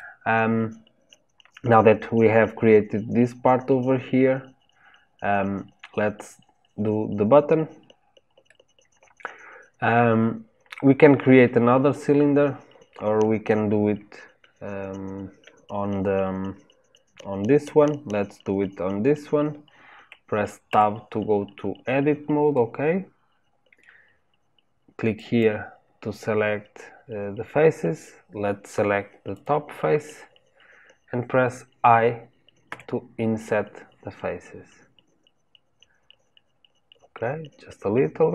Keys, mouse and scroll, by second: 8.5-11.5 middle drag, 20.6 Tab, 22.5-23.8 middle drag, 23.8-25.1 scroll down 1, 25.1 click, 29.3 click.